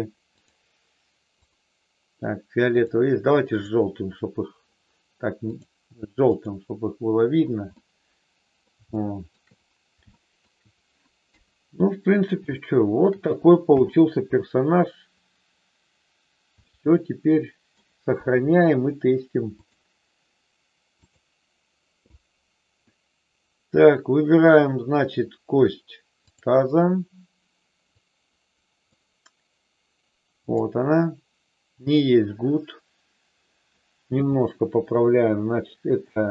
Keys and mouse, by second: 1.4 click, 3.4 click, 5.4 click, 6.3 click, 7.7 middle click, 8.9 shift+middle click, 10.1 shift+middle click, 11.2 KP_1, 12.4 shift+middle click, 13.6 n, 16.7-17.7 middle drag, 18.1 KP_1, 19.4-21.2 drag, 28.1 click, 30.4 click, 34.1 n.